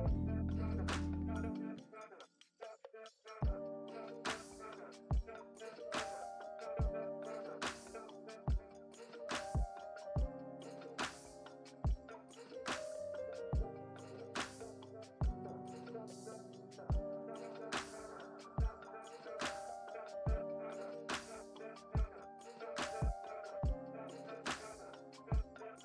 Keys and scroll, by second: 1.5 space, 2.7 space, 22.2 space, 23.6 space, 24.6 space.